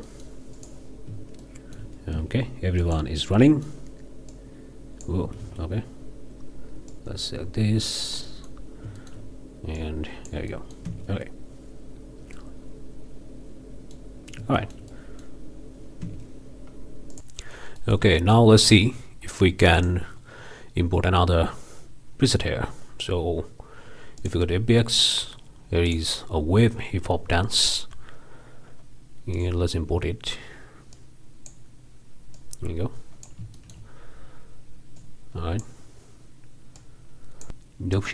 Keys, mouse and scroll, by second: 0.1-0.4 middle drag, 0.6 drag, 1.4-2.0 shift+middle drag, 2.1 shift+space, 2.8-3.2 drag, 3.4-3.9 drag, 4.3 click, 5.4 ctrl+z, 6.9-8.2 drag, 8.3-8.6 middle drag, 8.6 scroll down 1, 9.0 shift+middle click, 9.8 click, 10.5 middle click, 10.9 space, 12.0 scroll up 2, 12.4-14.2 middle drag, 14.2 scroll down 2, 14.6-15.4 shift+middle drag, 16.0 space, 17.1 click, 17.8-18.5 drag, 19.8-20.1 drag, 24.2-24.5 drag, 25.8 click, 26.7 scroll down 2, 27.5-27.8 drag, 27.9 scroll down 2, 29.3 click, 30.9-31.7 drag, 32.3-33.4 drag, 33.5-33.9 shift+drag, 33.9 shift+scroll down 1, 35.0 click, 36.8-38.1 drag.